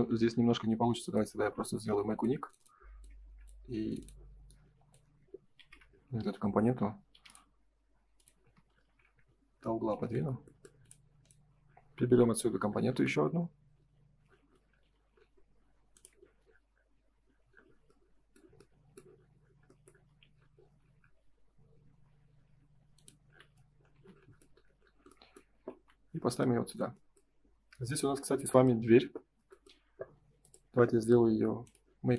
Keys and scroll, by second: 5.5 shift+f, 8.3 space, 8.5 Escape, 9.9 ctrl+s, 12.8 m, 14.8 F3, 19.9 F3, 23.2 F4, 23.9 space, 25.6 ctrl+s.